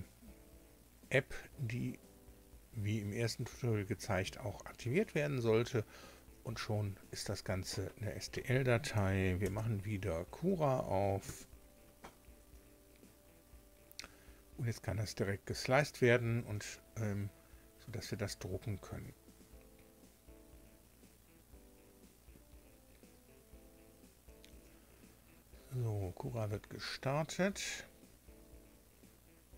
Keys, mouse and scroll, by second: 9.3 ctrl+alt+b, 11.2 KP_7.